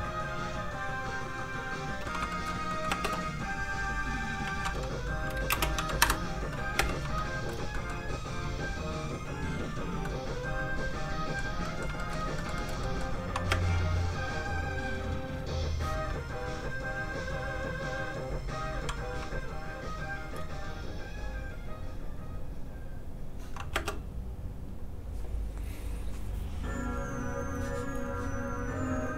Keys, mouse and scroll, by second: 2.2 shift+middle click, 2.6 shift+scroll up 1, 2.7 middle click, 2.8 space, 4.1 click, 4.4-6.7 typing, 6.0 Return, 7.1 shift+middle click, 7.7 middle click, 7.8 middle click, 12.3 shift+middle click, 12.4 shift+middle click, 13.5 shift+space, 14.5 click, 19.4 shift+click, 22.0 click, 22.5 click, 23.7 space.